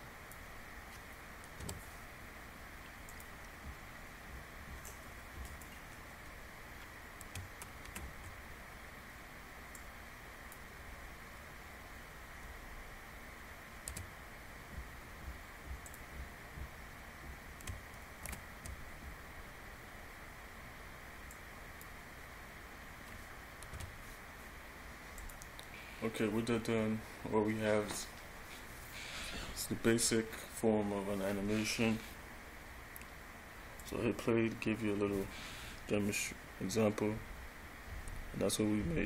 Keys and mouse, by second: 1.8 i, 5.0 click, 8.1 shift+Up, 10.0 click, 14.1 i, 18.4 shift+Up, 21.5 click, 21.8 click, 23.9 i, 33.9 click.